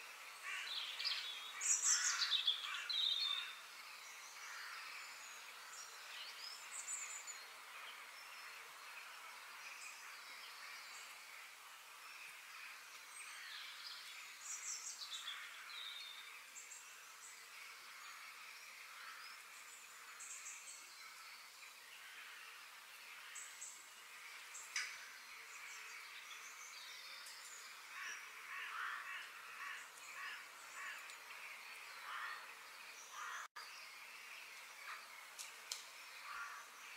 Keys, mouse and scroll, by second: 0.9-2.8 middle drag, 3.4-5.4 middle drag, 5.7 f, 7.7 middle click, 8.3-9.2 scroll up 3, 9.2-11.0 shift+middle drag, 12.2-14.0 middle drag, 16.8-17.8 middle drag, 19.7-20.7 middle drag, 21.1-23.0 middle drag, 24.4 middle click, 25.3 f, 26.8-29.2 middle drag, 32.5 KP_3, 33.9-34.6 scroll up 2, 34.6-36.5 shift+middle drag.